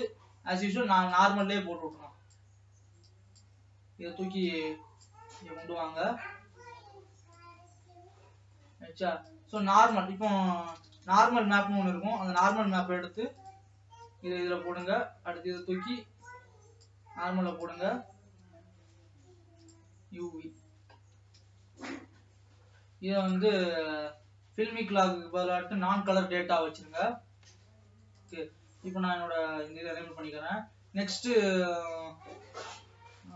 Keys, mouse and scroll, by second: 0.5-1.5 scroll down 1, 1.5 click, 3.1-7.9 drag, 7.9 middle click, 8.3 scroll up 2, 8.8 middle click, 9.4-18.8 drag, 19.0-21.8 drag, 21.8 ctrl+s, 28.3-31.8 drag.